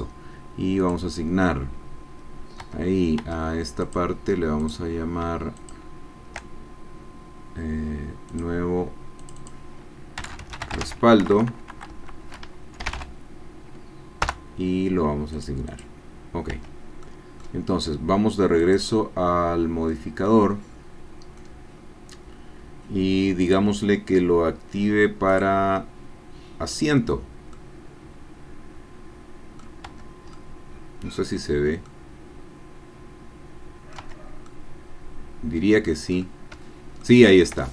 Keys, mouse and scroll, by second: 0.8 click, 2.6 Tab, 3.8 click, 4.9 click, 5.9 shift+click, 8.3 click, 9.2 click, 10.2-11.3 typing, 12.8 l, 12.9 o, 14.4 Return, 15.5 click, 16.5 Tab, 17.0 click, 18.6 click, 19.9-21.5 drag, 23.5 click, 25.3 click, 26.7 click, 27.5-29.8 drag, 30.0 Tab, 30.3-34.2 drag, 34.1 Tab, 34.2 middle click, 34.4-36.0 drag, 36.1-37.0 scroll up 1, 37.0-37.7 shift+drag.